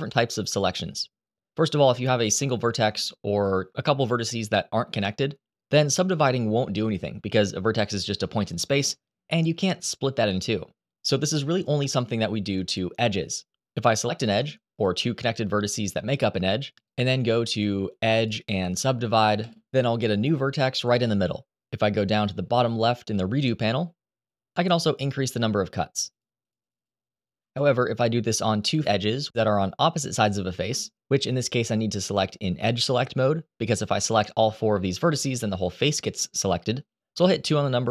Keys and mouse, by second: 0.2 click, 3.1 shift+click, 13.9 click, 17.9-19.2 drag, 25.8 click, 26.1 click, 26.3 click, 27.3 ctrl+z, 31.2 shift+click, 32.0 shift+click.